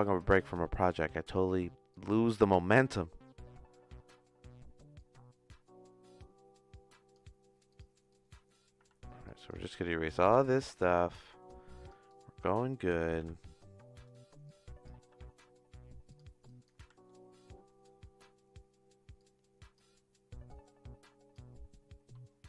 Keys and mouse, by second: 0.0-2.3 typing, 0.1 click, 1.0 click, 1.9 click, 4.9 click, 6.7 click, 7.7 click, 8.2 click, 8.8 x, 9.3 click, 9.6 x, 10.3 click, 11.1 g, 12.1 click, 13.2 g, 14.5 click, 15.0 g, 16.5 click, 16.8 x, 17.1 middle click, 19.1 click, 20.5 click.